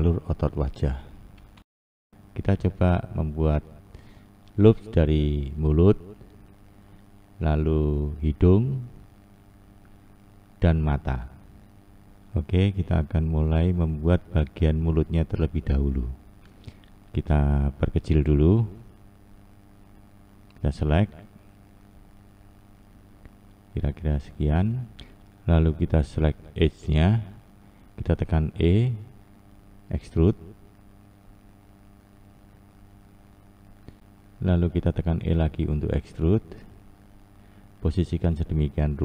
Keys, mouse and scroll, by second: 10.3-12.2 scroll down 2, 14.8-17.5 scroll up 3, 17.5-18.0 scroll down 1, 18.0-19.0 scroll up 3, 19.7 click, 20.6 click, 24.9 2, 25.8 click, 27.1 e, 34.8 e.